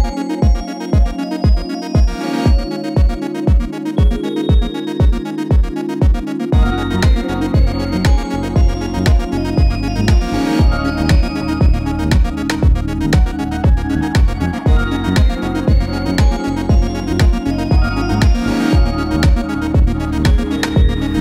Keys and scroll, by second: 18.6 Left, 18.7 Left, 18.9 Left, 19.1 Right, 19.2-21.2 Right.